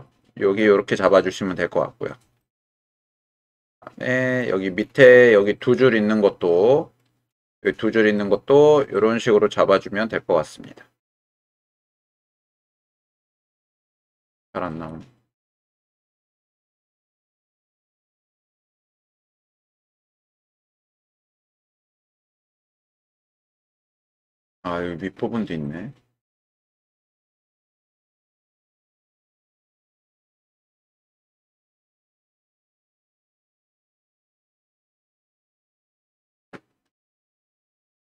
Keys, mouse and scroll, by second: 2.4-4.4 middle drag, 5.4-7.0 middle drag, 7.6 middle click, 8.9-10.5 drag, 11.8-13.0 drag, 14.0 click, 18.4-19.8 drag, 20.7 middle click, 22.1-26.6 middle drag, 26.6-27.7 scroll up 2, 27.7-28.8 scroll up 1, 28.8-29.1 scroll up 1, 29.1-33.4 middle drag, 34.4-38.1 middle drag.